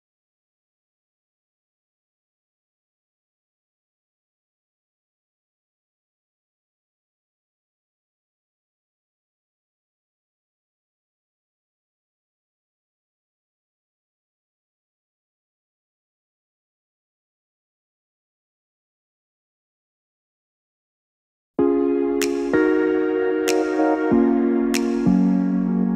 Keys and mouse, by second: 7.8 k, 25.6 click.